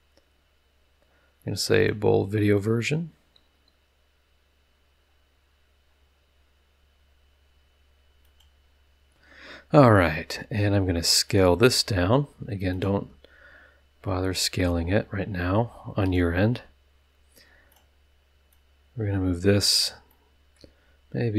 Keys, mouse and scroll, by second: 1.6 click, 5.3 scroll down 2, 5.9 scroll up 2, 8.2 click, 10.3 s, 11.3 click, 11.6 s, 12.7 click, 13.0 s, 16.0 click, 16.9 middle click, 17.7 click, 18.5-19.8 drag, 20.1-20.7 middle drag, 20.9 s.